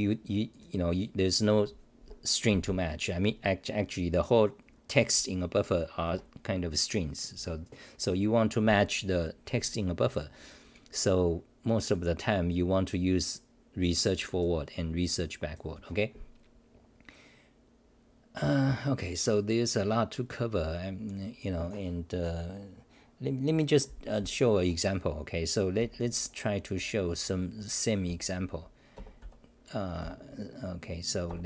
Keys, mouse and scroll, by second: 0.5 w, 4.7-7.1 scroll up 2, 27.5 d.